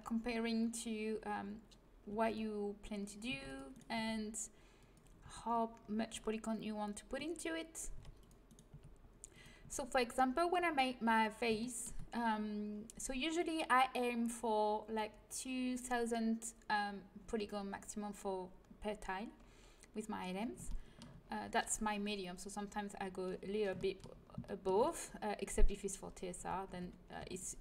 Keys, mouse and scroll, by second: 0.0-2.2 middle drag, 2.0 g, 3.2 c, 3.9 g, 5.2 a, 7.9 c, 8.6 g, 9.5 a, 19.3-23.7 middle drag, 26.3 a, 26.7 a, 27.1 c.